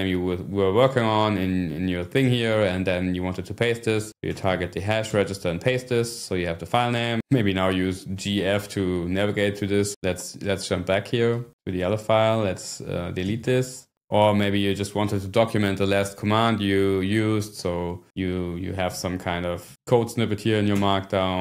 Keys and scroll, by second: 2.3 }, 4.1 ", 4.5 #, 5.1 p, 7.2-8.8 typing, 11.5 ctrl+6, 13.2 d, 14.2 Page_Down, 18.9 i, 19.7 `, 20.8 Return.